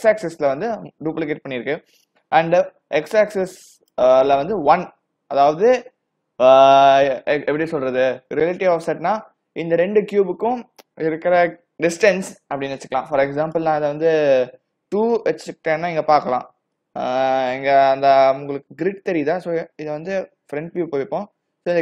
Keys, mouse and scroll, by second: 3.9 click, 13.5 click, 16.9 click, 20.1 KP_1.